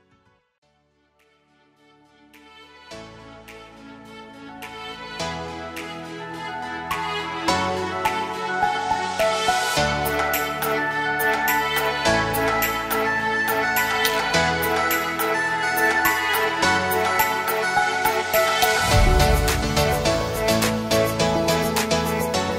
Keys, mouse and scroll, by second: 0.6 alt+scroll up 1, 0.8-1.3 click, 1.4 alt+scroll down 1, 1.7 space, 1.8 drag, 3.0-3.4 alt+scroll down 2, 3.4 space, 3.6-4.1 click, 4.2-4.8 scroll up 2, 5.1-5.9 click, 6.0 space, 6.0 click, 6.2 space, 6.3-6.8 click, 7.2 alt+scroll up 1, 7.4-7.8 click, 7.8-9.9 typing, 7.9 click, 8.2-8.5 click, 8.6 click, 8.8-9.5 click, 9.6 click, 9.9 drag, 12.0 space, 12.1 click, 12.2 space, 12.5-12.8 click, 13.2 space, 13.2 click, 13.8-15.1 drag, 15.1 space, 15.2 click, 15.4 space, 15.4 click, 16.4 space, 16.5 click, 19.3-19.8 alt+scroll down 2, 20.4 space, 20.6 click, 21.1-22.0 alt+scroll down 4, 22.0-22.5 drag.